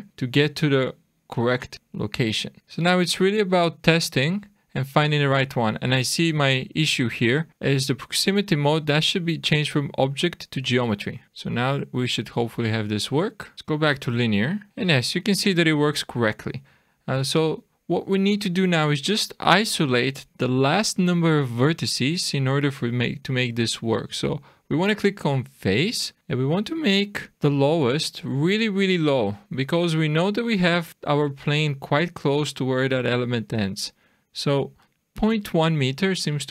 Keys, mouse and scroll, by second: 0.1 click, 1.7 click, 2.6 click, 3.1 click, 8.8 click, 12.4 click, 13.5 click, 14.7 click, 16.5 click, 24.7 click, 26.0 click, 27.3 click, 31.2-33.6 scroll down 3, 36.2 scroll up 2.